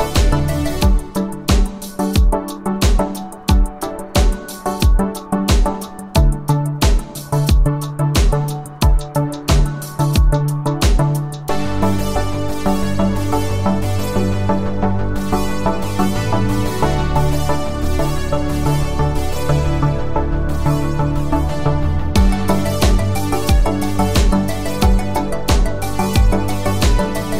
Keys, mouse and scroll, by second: 1.9 click, 9.3 click, 11.1 click, 16.1 click, 22.3 click, 25.1 click, 26.7 click.